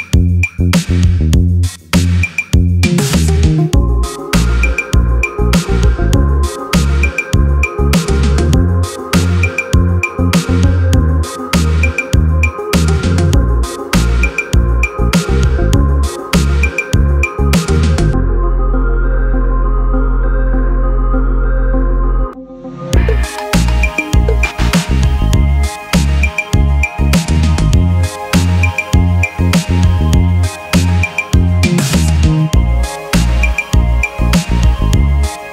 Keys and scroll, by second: 10.6-13.0 typing, 15.2 e.